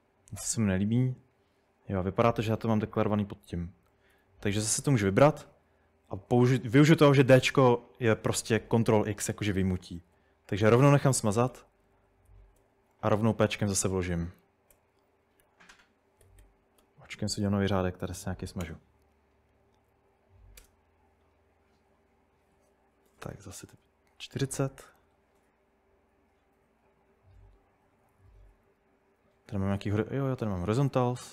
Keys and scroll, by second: 1.6-4.8 typing, 7.2 d, 10.0-13.1 typing, 14.8 typing, 15.4 Escape, 16.2-18.6 typing, 18.6 Return, 20.1 Up, 20.6 Return, 22.9-23.6 typing, 28.1-31.3 typing.